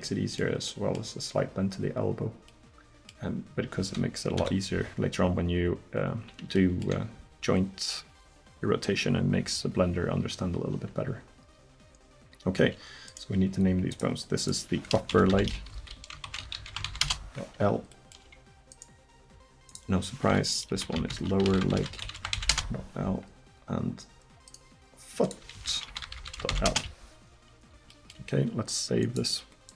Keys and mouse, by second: 4.4 KP_1, 13.1 right click, 13.9-15.0 middle drag, 15.5 p, 17.0-18.7 right drag, 18.8 right click, 19.7 middle click, 24.5 click, 26.1-27.1 drag, 26.1 o, 27.9-29.1 drag, 29.1 middle click.